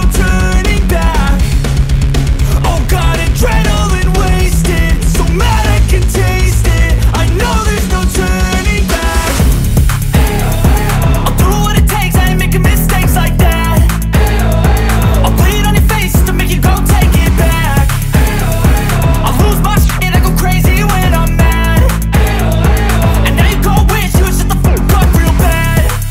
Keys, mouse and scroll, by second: 2.4 alt+scroll down 1, 2.7 space, 2.8 click, 3.8 space, 3.9-4.2 alt+scroll up 1, 4.5 click, 8.9 alt+scroll down 1, 9.2 space, 9.3-12.0 click, 9.7 space, 11.2 space, 11.7 click, 11.9 space, 13.1 space, 13.3 click, 13.4 space, 13.6 click, 13.7 space, 14.4 alt+scroll down 1, 14.8 space, 14.8 click, 15.2 space, 17.3 ctrl+click, 22.2 ctrl+click, 23.8 ctrl+click, 24.4 ctrl+e.